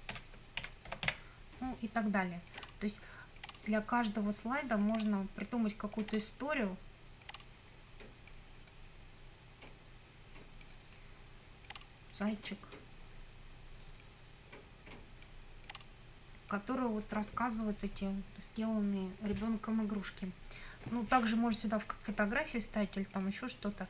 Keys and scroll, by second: 0.0-1.6 typing.